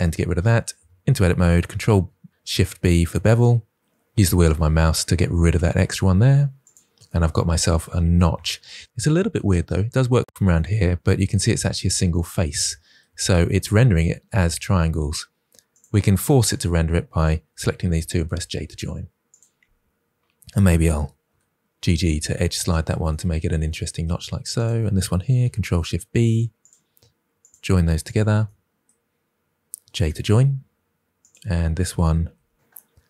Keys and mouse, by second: 0.0 n, 0.7 Tab, 1.9 ctrl+shift+b, 13.6 middle click, 18.0 j, 20.8 g, 21.2 g, 21.8 click, 25.5 ctrl+shift+b, 28.0 shift+click, 30.0 j, 31.1 click, 32.2 g, 32.3 g.